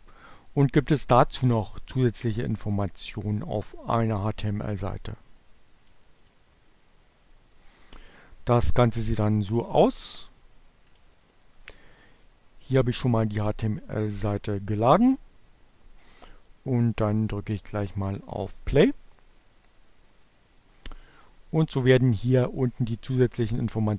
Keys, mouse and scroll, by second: 2.1-4.9 drag, 5.0-6.0 drag, 10.4 click, 17.4 click.